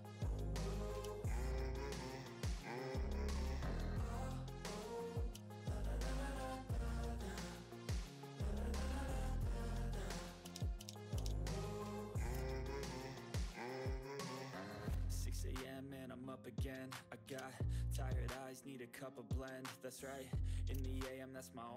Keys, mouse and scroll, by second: 0.3 click, 1.2 click, 2.3 click, 4.1 click, 5.3 ctrl+scroll down 1, 5.5 ctrl+middle click, 6.0 click, 7.5-10.4 drag, 10.4 ctrl+z, 11.2 ctrl+z, 11.4 click, 15.4 click, 17.6 ctrl+middle click, 18.7-19.0 ctrl+scroll up 1, 19.1 click.